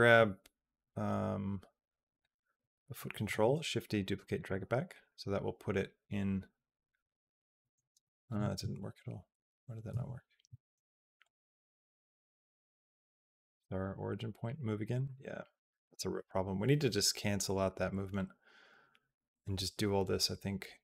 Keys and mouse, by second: 2.0 click, 3.3 shift+d, 4.9-8.6 drag, 8.6 ctrl+z, 9.9 ctrl+z, 11.1-14.3 drag, 15.7-20.8 drag.